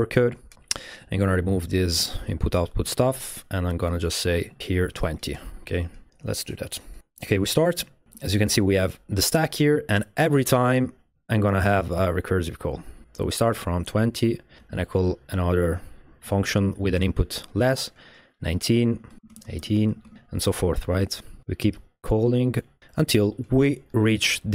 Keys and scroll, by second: 0.2 super+v, 3.2 BackSpace, 4.7-5.5 typing, 8.1 space, 13.4 space, 14.0 space, 14.6 space, 18.7-20.2 typing.